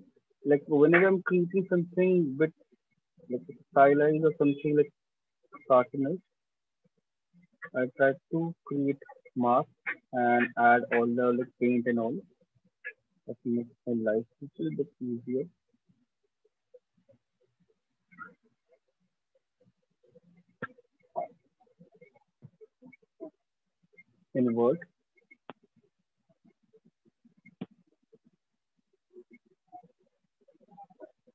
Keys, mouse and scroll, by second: 8.1 ctrl+click, 9.0 shift+click, 9.1 shift+click, 9.8 alt+click, 11.3 shift+click, 14.4 shift+click, 15.7 click, 17.6 click, 19.4 click, 19.5 shift+click, 21.8 shift+click, 21.9 shift+click, 23.6 ctrl+click, 26.3 click, 27.9 click, 30.5 click.